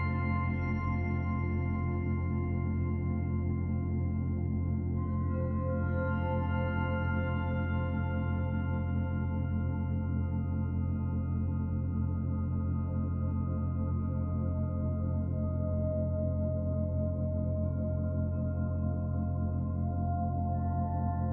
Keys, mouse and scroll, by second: 0.6 shift+middle click, 1.2 middle click, 3.2 click, 3.4 click, 12.3 click, 17.1 click, 17.4 right click, 19.9 click, 20.0 click.